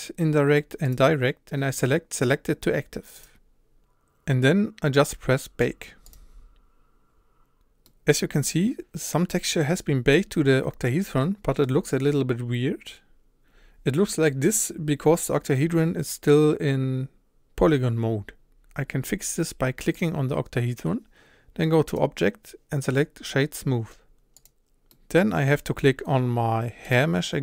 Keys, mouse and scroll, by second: 0.8 click, 3.1 click, 7.1 click, 7.9-11.7 middle drag, 11.7 scroll down 2, 12.0-12.8 scroll up 2, 19.5 click, 20.0 click, 24.5 click, 25.0-26.9 middle drag, 26.9 click.